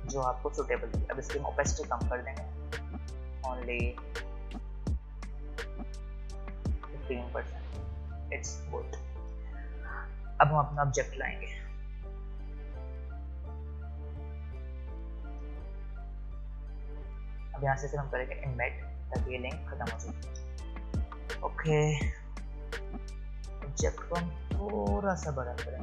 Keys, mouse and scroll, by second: 7.3-7.9 alt+scroll up 1, 10.7 space, 11.0 click, 11.2 space, 12.4 click, 13.1-13.5 scroll down 1, 13.5-18.5 drag, 21.6 scroll up 2, 24.2-25.8 alt+shift+drag.